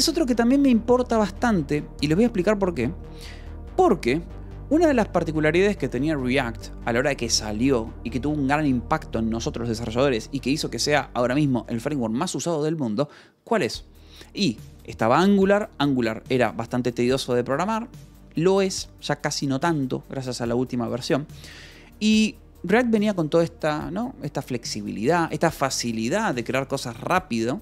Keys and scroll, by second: 0.2 k, 1.5-2.9 typing.